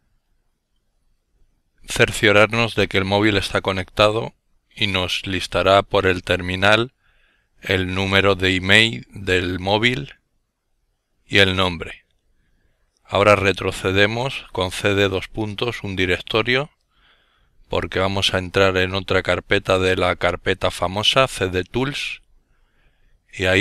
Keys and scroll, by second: 1.2 typing, 11.8-13.1 typing, 13.6 Return, 15.9 typing, 17.0-20.3 typing, 20.4 Return, 22.4 typing.